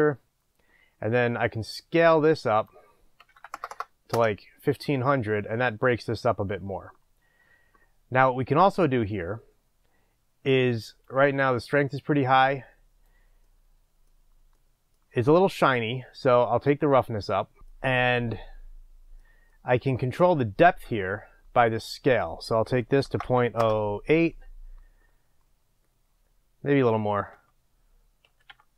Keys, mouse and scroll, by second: 1.2-1.6 scroll up 1, 1.6-4.1 middle drag, 4.1-13.5 drag, 4.1 KP_0, 4.2 Return, 13.5-16.7 middle drag, 16.7 click, 17.6-23.6 middle drag, 23.6-28.7 drag, 23.7 Return.